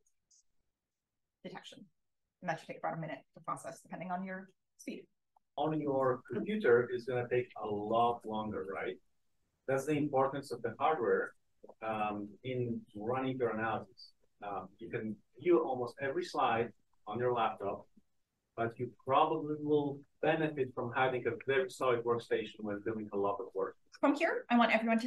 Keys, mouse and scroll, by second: 13.3 scroll down 1, 13.4 click, 17.0-17.3 drag, 17.5-18.3 scroll down 2, 18.3-18.9 drag, 18.3-21.5 scroll down 1, 21.5 click, 21.5-22.9 scroll down 1, 21.7-23.9 drag, 22.9-23.5 scroll down 1, 23.5-25.0 scroll up 1.